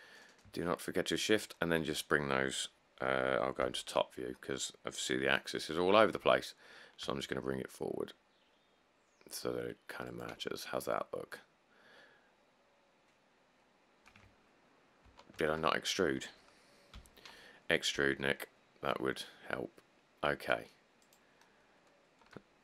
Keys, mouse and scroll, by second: 3.8 7, 6.4 g, 15.3 ctrl+z, 17.2-18.2 typing.